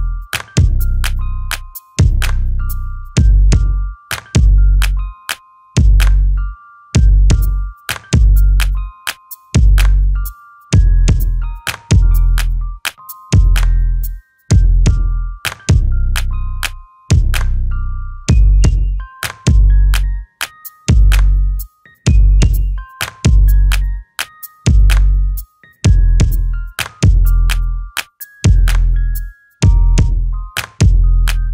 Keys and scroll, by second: 2.9-3.7 typing, 24.3 Escape.